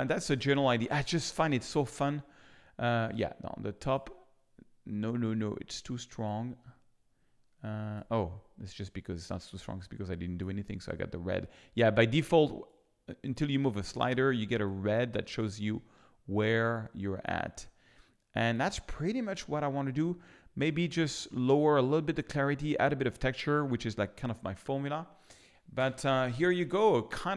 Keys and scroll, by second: 25.7 f.